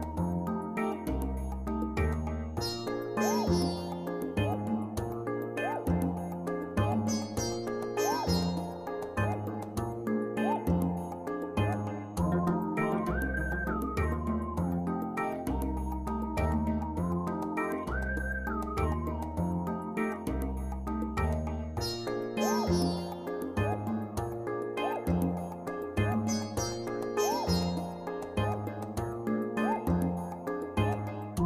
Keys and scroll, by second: 28.6 ctrl+c.